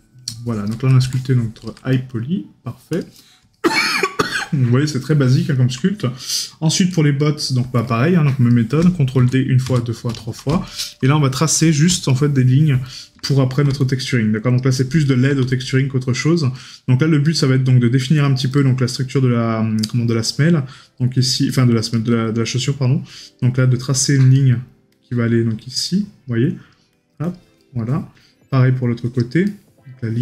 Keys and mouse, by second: 2.0 right click, 3.6 right click, 7.9 right click, 10.7 right click, 12.2 right click, 15.1 right click, 16.6 right click, 18.6 right click, 22.0 right click, 24.4 right click, 27.7 right click, 29.5 right click.